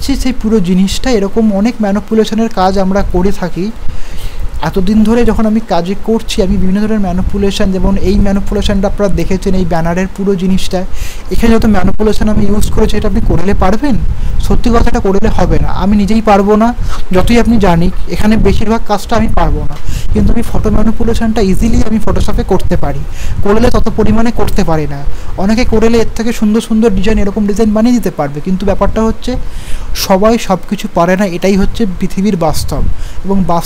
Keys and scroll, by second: 5.6 ctrl+o.